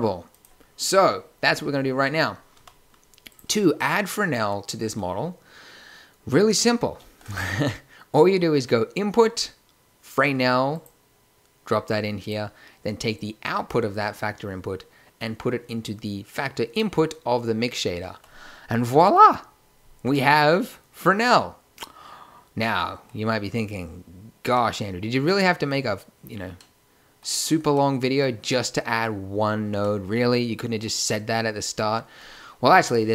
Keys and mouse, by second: 0.5-2.2 right drag, 2.6 a, 7.0 shift+a, 13.2-15.1 drag, 20.5-21.5 middle drag, 24.5-25.2 middle drag, 30.2-31.0 middle drag.